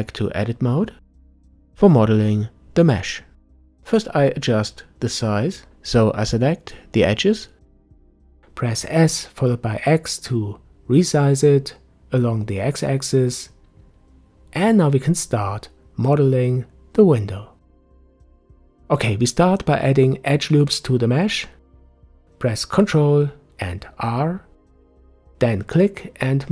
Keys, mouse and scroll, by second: 0.5 Tab, 3.9-6.5 drag, 6.5 s, 11.8-13.2 drag, 13.6 click, 15.1-16.1 drag, 16.1-19.3 middle drag, 20.3 ctrl+r.